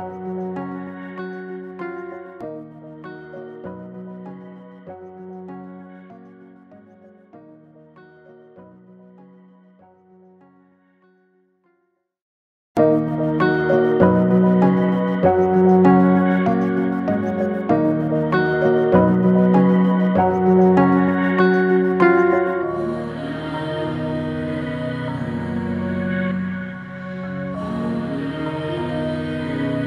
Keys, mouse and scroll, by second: 0.0-1.6 typing, 2.2 click, 3.9-5.5 drag, 5.5 ctrl+g, 6.6 click, 6.6-7.7 typing, 6.8 click, 8.3-10.0 alt+shift+drag, 15.0 click, 15.1-17.9 drag, 17.9 click, 19.7 click, 20.9-25.6 drag, 25.6 click, 28.2 click.